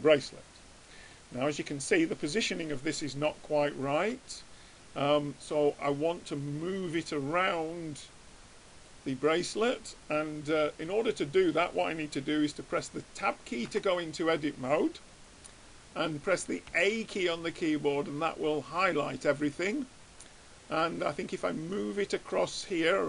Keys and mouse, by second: 13.9 Tab, 16.8 a, 21.1-22.6 drag.